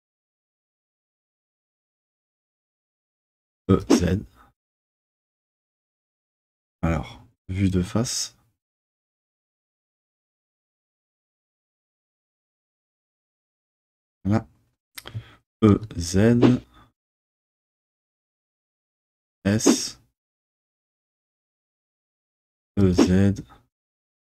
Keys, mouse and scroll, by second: 6.5 z, 6.5 click, 7.9 KP_1, 8.6 KP_1, 12.1 KP_1, 15.7 e, 15.7 z, 18.3 click, 18.7 s, 20.9 click, 22.6 e, 22.8 z.